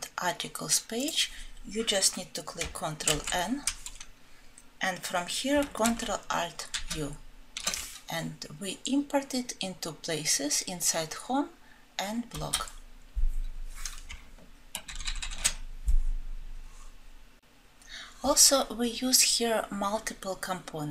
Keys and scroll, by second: 3.0 alt+Home, 6.6 ctrl+alt+F7.